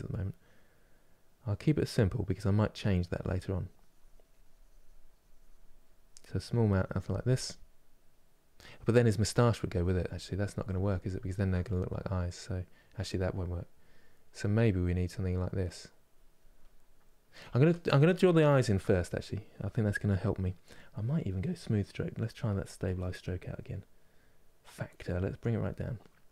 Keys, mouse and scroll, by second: 9.8 ctrl+z, 10.3 ctrl+z, 10.5 ctrl+z, 11.4-14.2 middle drag, 14.2-16.3 drag, 16.3 middle click, 17.2 ctrl+z, 18.2-26.3 shift+middle drag.